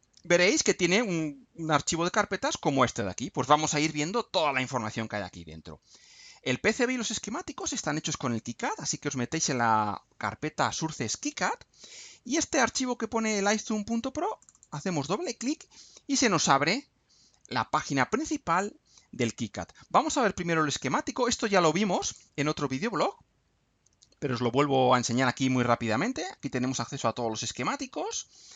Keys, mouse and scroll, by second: 7.6 click, 12.3 scroll down 1, 14.4 click, 21.9 click, 24.1-24.5 scroll up 1, 25.0-25.4 scroll up 2, 25.8 middle click, 26.2-26.5 scroll up 1, 26.5-27.4 scroll down 1, 27.4 click.